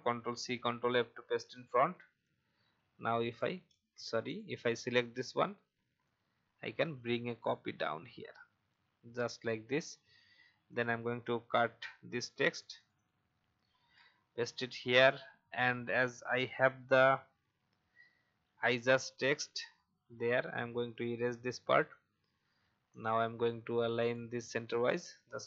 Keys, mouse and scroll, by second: 0.0 ctrl+c, 0.5 ctrl+f, 2.2-3.4 drag, 4.2-9.5 drag, 11.5 ctrl+x, 12.6 click, 13.7 ctrl+v, 15.0-18.6 drag, 21.3 BackSpace, 22.9 click.